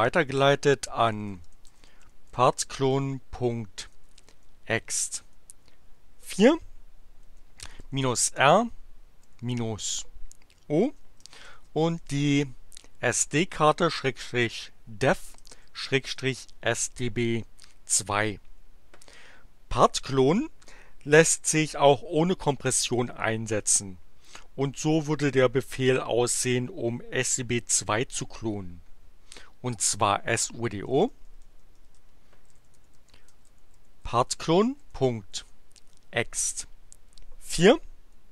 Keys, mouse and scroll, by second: 0.3-5.2 typing, 7.3-8.6 typing, 9.8 o, 10.9-12.7 typing, 15.1-17.1 typing, 28.8 BackSpace, 32.2-36.3 typing.